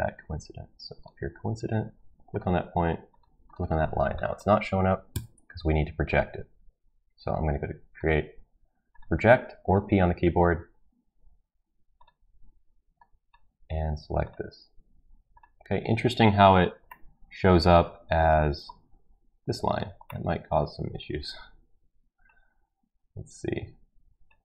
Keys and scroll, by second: 5.1 Escape.